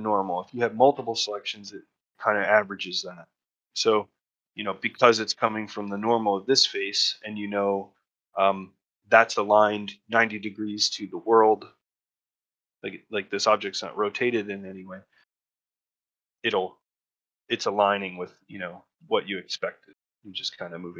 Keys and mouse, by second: 18.0 middle click, 20.1 middle click.